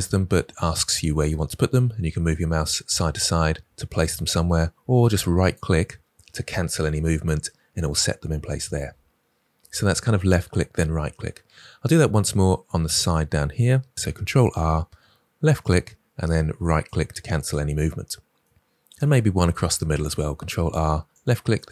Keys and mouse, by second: 14.3 ctrl+r, 15.5 click, 19.8 ctrl+r, 21.1 click, 21.5-21.7 right drag.